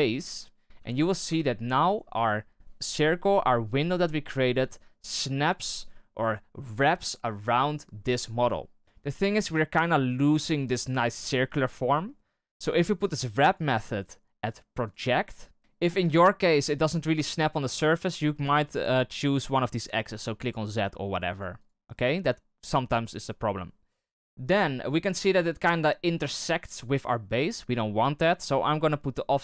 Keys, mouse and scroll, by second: 0.7 KP_3, 1.2 KP_1, 13.4-15.6 drag, 19.9 click, 20.6 click, 21.2 click, 21.5 click, 24.1-25.0 scroll up 2, 29.3 click.